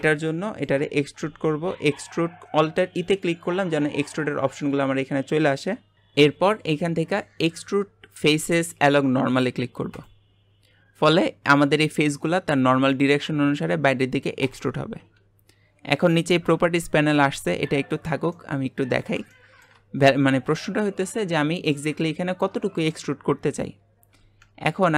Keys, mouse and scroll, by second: 0.3 middle click, 1.0 alt+e, 18.3-22.4 middle drag.